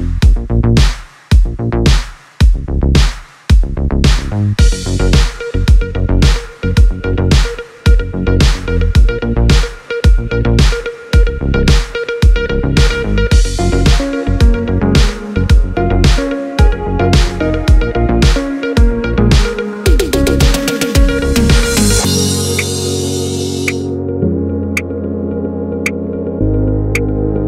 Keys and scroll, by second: 11.4 super+z, 22.5 super+z, 23.0 super+z.